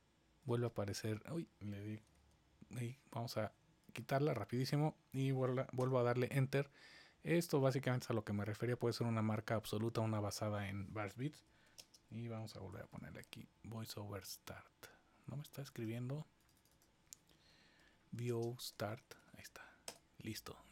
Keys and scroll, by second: 2.1 super+z, 5.7 Return, 11.2-13.6 typing, 17.5-19.6 typing, 19.8 Return.